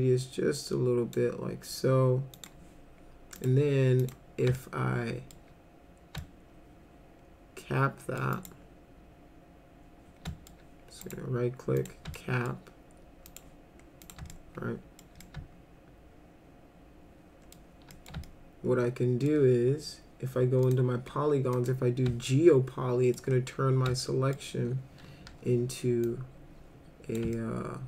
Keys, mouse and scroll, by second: 2.3 click, 3.4 click, 4.0 click, 4.6 alt+middle click, 6.2-8.2 alt+middle drag, 8.3 alt+right click, 10.3 alt+middle click, 11.0 right click, 11.8 click, 12.2 alt+middle click, 13.3 click, 14.0 click, 14.3 alt+middle click, 15.2-17.5 alt+middle drag, 17.9 middle click, 18.3-19.3 alt+middle drag, 20.6 click, 21.5 click, 22.3 alt+middle click, 23.9 alt+middle click, 25.3 r, 26.0-27.2 drag, 27.4 alt+middle click.